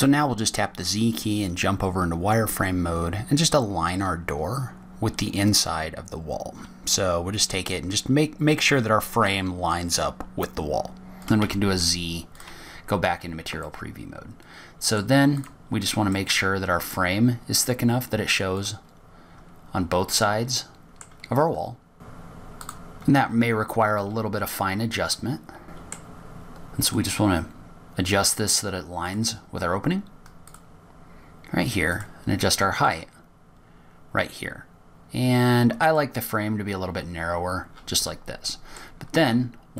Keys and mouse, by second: 2.1-3.0 drag, 4.7 z, 7.5 g, 12.8 z, 15.0-16.4 middle drag, 16.8 click, 17.6 middle drag, 17.8 click, 17.9 middle click, 20.0 click, 21.6-22.0 drag, 22.2-23.9 drag, 25.7 click, 25.9 g, 28.2 click, 30.4 click, 31.8 click, 33.4-34.4 drag, 37.3 click.